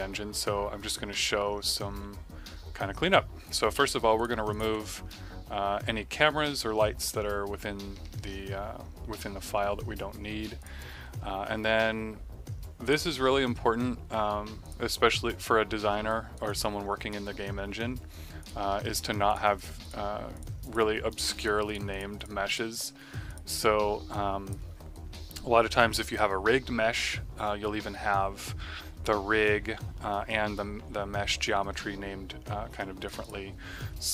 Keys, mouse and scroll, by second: 2.6 ctrl+Num_Lock, 4.1 click, 5.4 Delete, 10.5 click, 16.0 right click, 16.4 click, 18.3 click, 24.1 click, 24.9 right click, 25.2 middle click, 25.6 right click, 33.0 click.